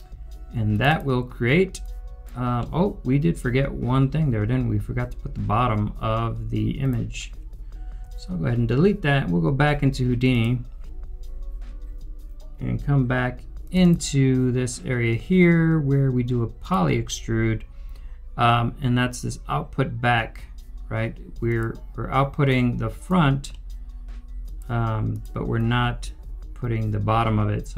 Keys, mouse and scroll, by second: 0.8 scroll down 1, 1.0 double click, 2.5 middle click, 8.0 Delete, 13.7 Delete, 13.8 double click, 23.4 double click, 23.5 middle click.